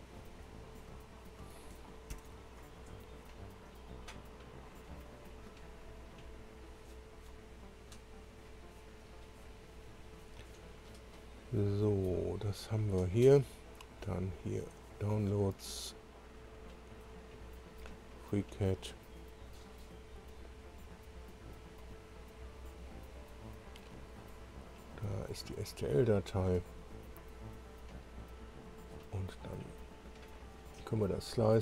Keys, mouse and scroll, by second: 2.1 ctrl+o, 14.2 click, 15.9-16.3 scroll down 1, 17.0-17.4 scroll down 1, 17.6-17.9 scroll down 1, 18.2-18.5 scroll down 1, 19.4 scroll down 2, 20.5 scroll down 2, 22.2 click, 24.8 click, 25.8 click, 26.4-29.2 middle drag, 30.3 click.